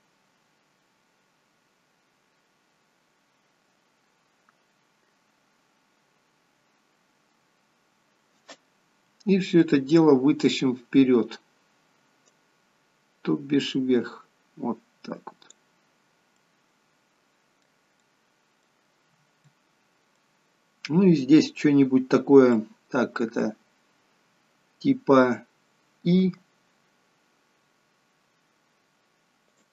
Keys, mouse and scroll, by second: 9.5 middle click, 12.2 click, 15.9-16.3 scroll down 3, 16.3 middle click, 17.9 middle click, 19.0-19.3 scroll up 2, 19.4 middle click, 22.5 middle click, 26.1 i.